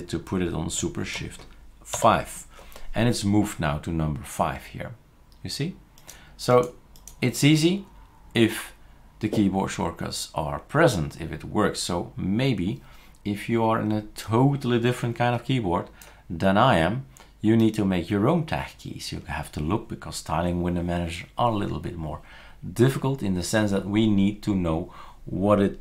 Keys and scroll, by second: 2.0 shift+super+5.